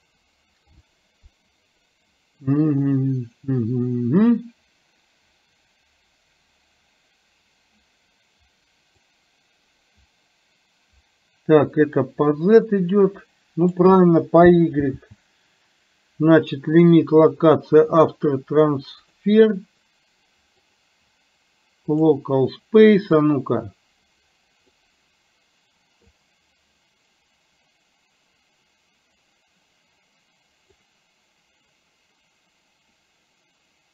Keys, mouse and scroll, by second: 9.3-13.9 drag, 19.1 click, 20.9-22.1 drag, 23.4-24.9 drag, 26.1-30.9 drag.